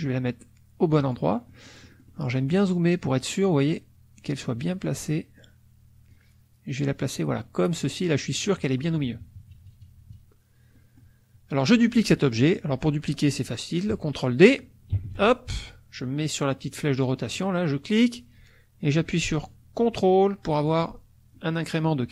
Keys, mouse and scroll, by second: 1.4 click, 2.1 middle click, 6.1-8.6 drag, 8.9 KP_Subtract, 11.1 middle click, 15.0 ctrl+d, 17.4-20.8 drag, 21.3 ctrl+click.